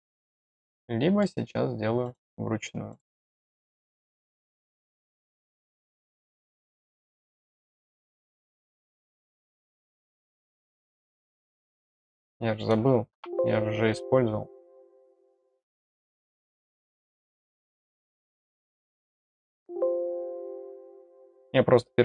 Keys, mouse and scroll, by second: 0.7 middle click, 2.0 right click, 2.9 click, 3.7 middle click, 4.6 click, 5.4 click, 6.2-7.6 drag, 8.3 middle click, 9.9 click, 11.3 click, 14.7 click, 16.3 click, 17.5 click, 19.3 click, 20.6 click.